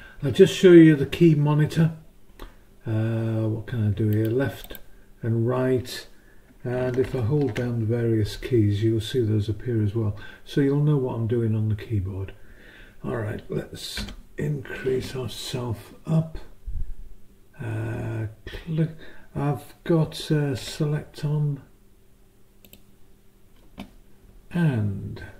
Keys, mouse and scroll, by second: 4.1 click, 4.6 click, 7.4 ctrl+alt+shift+click, 20.6 s, 22.6 click.